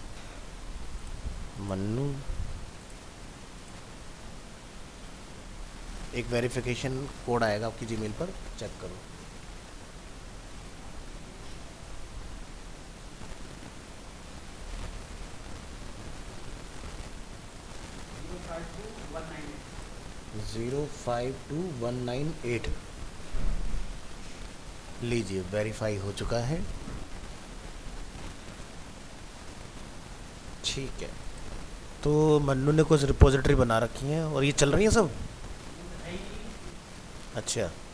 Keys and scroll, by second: 1.1 ctrl+v.